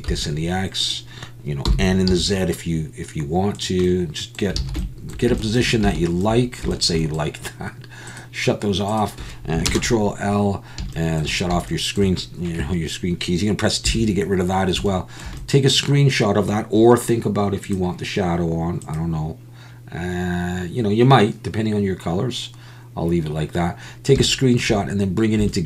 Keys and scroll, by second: 0.1 x, 1.7 r, 2.1 z, 4.6 alt+a, 9.7 ctrl+space.